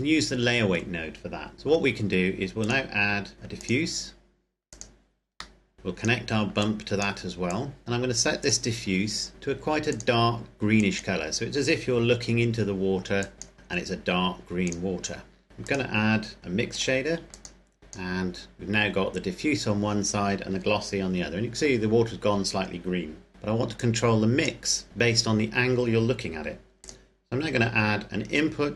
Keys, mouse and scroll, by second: 2.6 click, 10.5 click, 15.8 click, 23.3 middle drag, 24.0 click, 26.9 click.